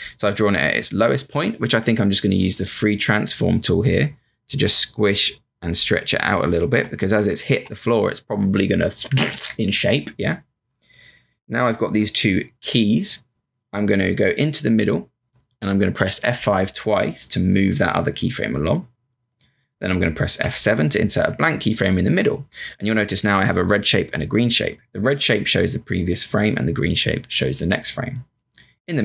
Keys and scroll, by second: 2.4 q, 17.1 F5, 17.4 F5, 20.4 F7.